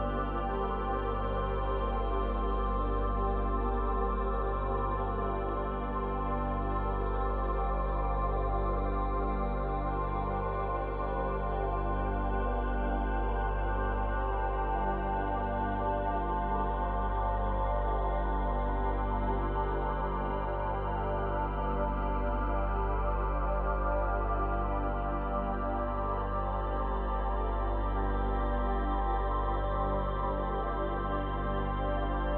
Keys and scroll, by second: 0.0 space, 29.2 space.